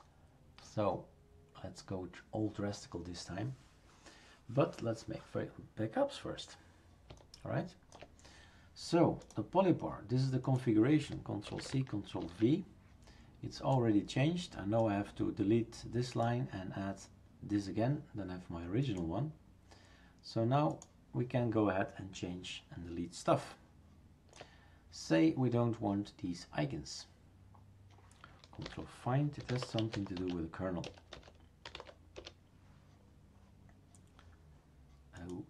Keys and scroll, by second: 11.5 ctrl+c, 12.2 ctrl+v, 28.6 ctrl+f, 29.2-32.3 typing.